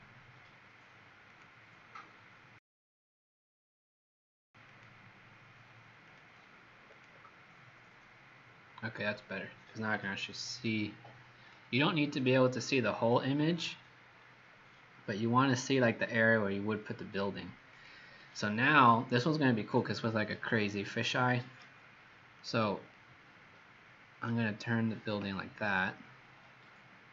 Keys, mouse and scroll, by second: 23.0 middle click.